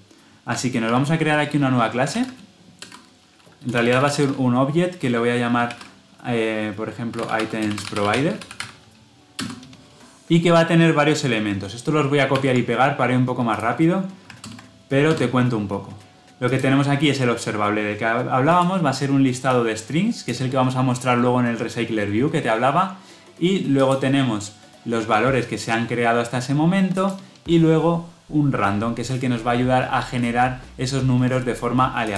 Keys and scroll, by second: 0.8 alt+Insert, 10.2 ctrl+z, 12.2 ctrl+v, 14.4 alt+Return.